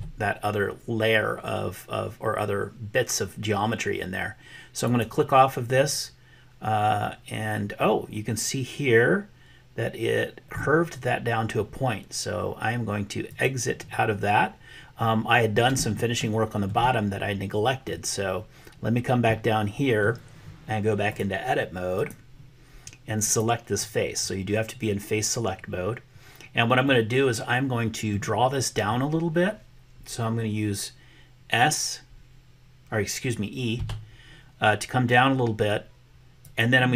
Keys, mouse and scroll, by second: 13.4 click, 16.1 shift+middle click, 17.7-20.1 middle drag, 21.2-22.3 drag, 23.3 click, 26.8-28.2 middle drag, 33.8 e.